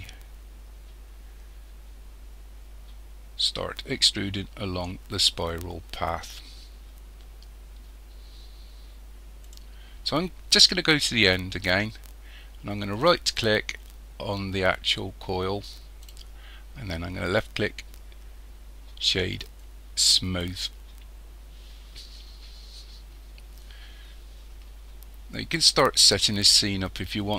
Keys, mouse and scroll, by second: 9.4 click, 11.1 click, 13.0-16.0 right drag, 19.0 right click.